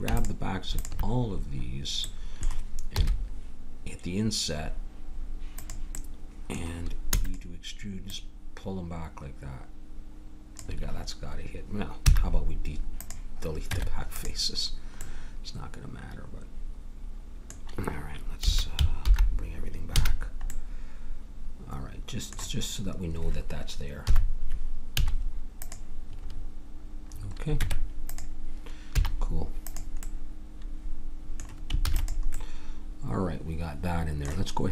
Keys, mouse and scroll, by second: 2.9 i, 7.1 e, 8.0-9.8 drag, 12.1 x, 13.7 Tab, 18.4 a, 19.0 alt+h, 19.9 a, 24.1 KP_3, 24.9 z, 27.6 Tab, 28.9 z, 31.9 ctrl+s.